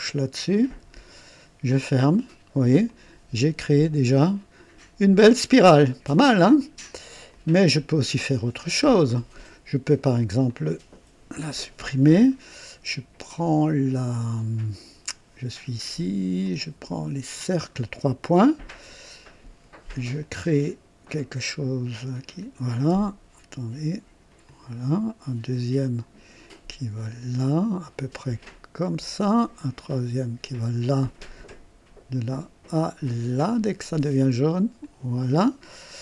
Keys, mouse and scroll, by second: 0.5 click, 1.7 click, 2.9-6.3 drag, 7.3 click, 8.6-9.0 scroll down 2, 9.1 right click, 10.5 click, 11.4 Delete, 16.4 click, 17.3 click, 20.2 click, 22.3 click, 24.4 click, 25.7 click, 27.0 click, 28.8 click, 30.4 click, 33.4 click, 34.8 click.